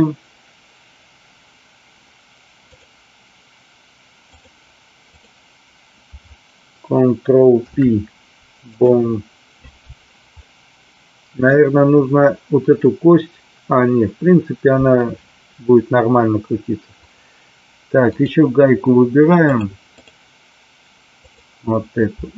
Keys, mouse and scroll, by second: 2.7-4.5 drag, 5.1 click, 7.5 ctrl+p, 10.4-11.1 middle drag, 11.2 middle click, 17.0 click, 18.1 click, 19.3 click, 21.2 click.